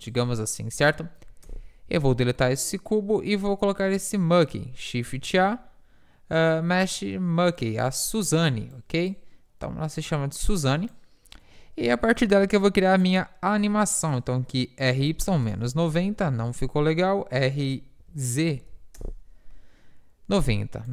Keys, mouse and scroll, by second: 0.1 Tab, 1.2 Delete, 2.0 shift+a, 5.2 shift+a, 10.2-13.6 drag, 11.7 r, 13.6 r, 16.3 ctrl+z, 17.0 r, 20.5-20.9 drag.